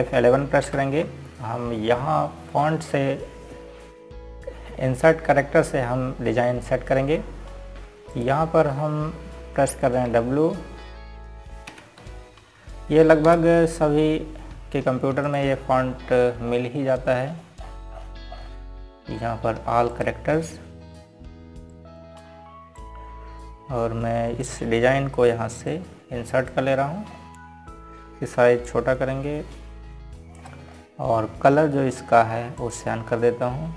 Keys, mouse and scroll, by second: 2.0 ctrl+Num_Lock, 2.3 ctrl+F11, 9.8 click, 11.7 w, 13.7 Down, 14.9 Return, 16.9 click, 17.8 scroll up 1, 21.6 click, 28.8 scroll up 1, 30.3 click, 32.4 scroll down 1.